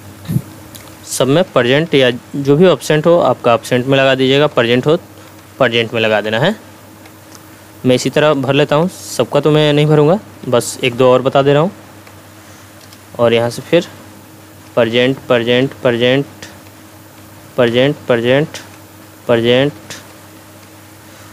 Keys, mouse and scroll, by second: 0.0-2.5 typing, 0.3 Tab, 0.8 Tab, 1.5 Tab, 2.1 Tab, 2.9 Tab, 3.6-6.6 typing, 3.9 Tab, 4.5 Tab, 5.4 Tab, 6.2 Tab, 7.1 Tab, 7.9 p, 8.3 Tab, 9.1 p, 9.6 Tab, 10.3 p, 11.4 Tab, 12.8 Return, 14.4 p, 14.7 Tab, 14.9 p, 15.1 Tab, 15.3 p, 15.6 Tab, 15.9 p, 16.7 Tab, 17.2 p, 17.7 Tab, 17.9 p, 18.3 Tab, 19.0 p, 19.5 Tab, 20.4 p, 20.6 Tab.